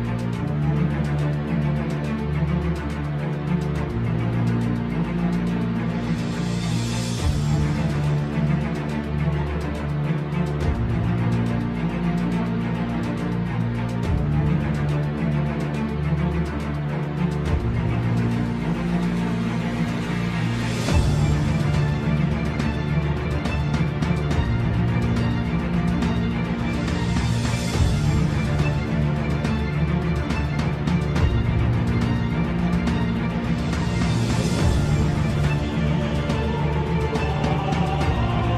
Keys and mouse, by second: 0.7 ctrl+r, 3.3 KP_3, 4.6 middle click, 7.2 shift+click, 8.1-9.9 drag, 10.4 shift+click, 11.2 KP_3, 12.7 g, 17.3 s, 19.6 g, 24.0-25.0 drag, 26.3 g, 28.8 middle click, 29.8 middle click, 30.8 click, 31.9 KP_3, 33.2 g, 36.8 ctrl+z, 37.2 middle click, 38.0 middle click.